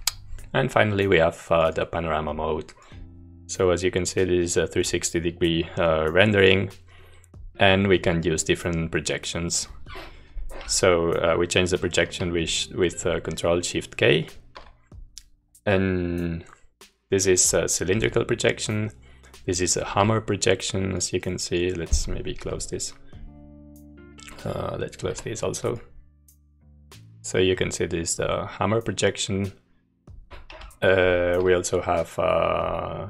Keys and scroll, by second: 10.8 ctrl+k, 18.4 ctrl+k, 22.6 u, 25.1 Escape, 30.5 ctrl+k.